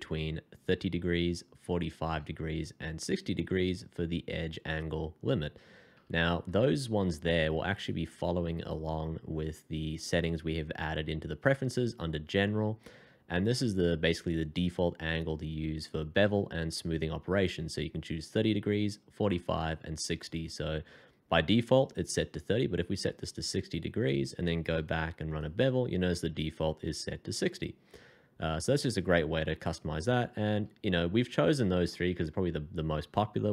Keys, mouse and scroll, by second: 0.6 a, 2.0 a, 5.9 Escape, 11.2-11.5 scroll down 1, 12.1 scroll down 1, 24.7 f, 30.5 Escape.